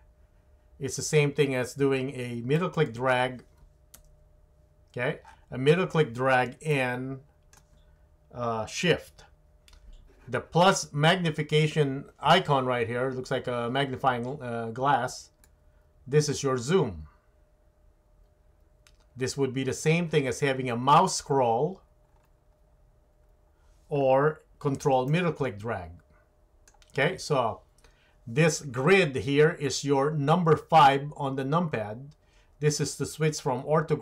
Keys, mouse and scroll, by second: 4.0 KP_Decimal, 15.5-19.8 drag, 25.2-26.9 ctrl+middle drag.